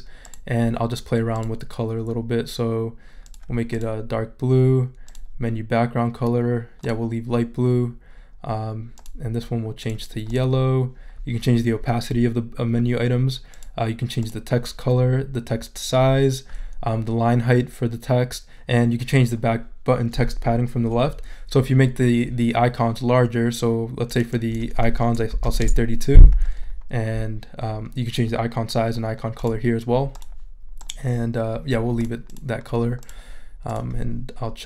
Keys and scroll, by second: 25.1-25.9 typing.